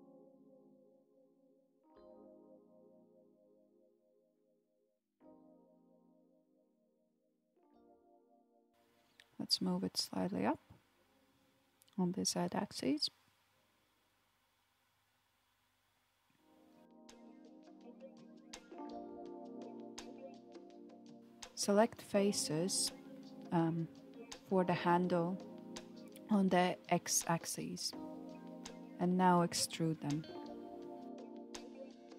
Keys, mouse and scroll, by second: 6.6 click, 8.5 alt+z, 9.5 click, 12.0 g, 17.3 click, 20.3 alt+z, 20.9-23.4 middle drag, 23.4-24.6 drag, 25.1 shift+click, 25.5 shift+click, 26.2 shift+click, 26.8 shift+click, 30.6-31.6 middle drag, 31.6 KP_1.